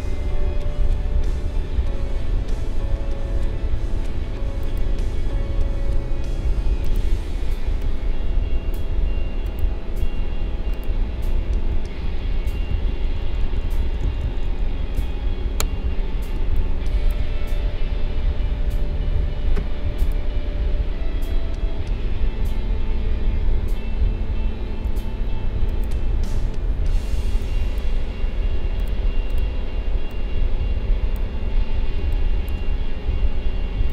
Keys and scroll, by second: 11.7 ctrl+z, 16.3 space, 32.0 space.